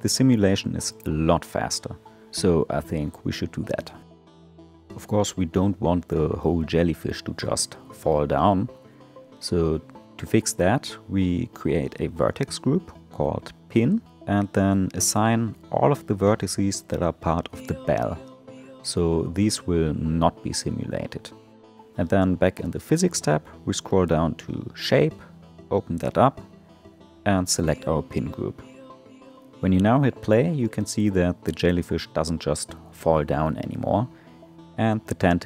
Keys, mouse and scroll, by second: 1.6 space, 3.9-7.1 drag, 7.9 click, 9.8-10.7 drag, 10.8-13.8 drag, 14.1 Tab, 14.9 1, 15.2 middle click, 15.7-16.3 scroll up 3, 16.3 click, 18.9-20.4 drag, 20.4 Tab, 22.0-22.6 scroll down 2, 23.4 click, 24.2-26.1 scroll down 13, 27.0-30.2 drag, 30.2 space.